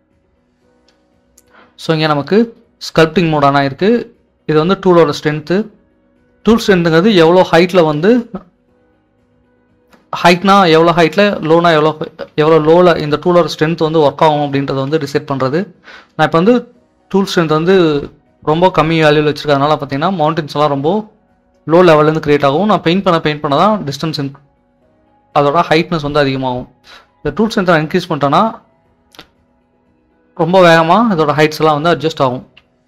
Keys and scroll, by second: 9.2-13.5 typing, 15.5 typing, 18.6-20.1 typing, 31.6-32.6 typing.